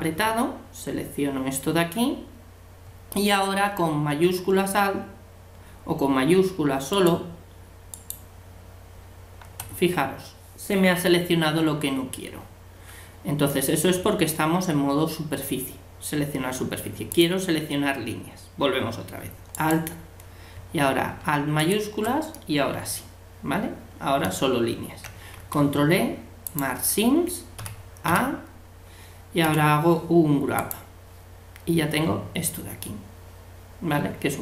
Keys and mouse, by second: 6.9-9.8 right drag, 17.1-19.0 drag, 19.6-21.4 right drag, 21.6 right click, 22.3-23.5 middle drag, 27.6 a, 28.1 a, 29.4 u.